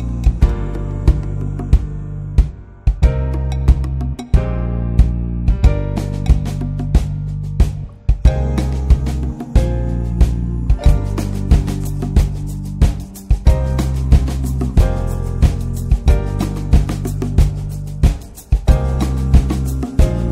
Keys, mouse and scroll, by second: 0.0 middle click, 0.4 s, 3.8 Tab, 4.4 click, 4.6 ctrl+1, 4.8 ctrl+2, 5.0 click, 5.2 middle click, 5.6 Tab, 5.9 scroll up 2, 6.1 shift+middle click, 6.7-7.0 scroll down 1, 7.0 1, 8.1 alt+middle click, 8.3 alt+z, 9.2 middle click, 9.6 alt+z, 10.6-11.8 drag, 12.6 click, 13.1 click, 13.5-14.7 shift+middle drag, 14.7 Tab, 14.9 Tab, 15.1 middle click, 15.4 2, 15.5 click, 15.8 alt+shift+click, 16.2 s, 17.6 Tab, 18.0 click, 18.2 ctrl+1, 18.5 ctrl+2, 18.9-20.0 middle drag, 20.0-20.3 drag.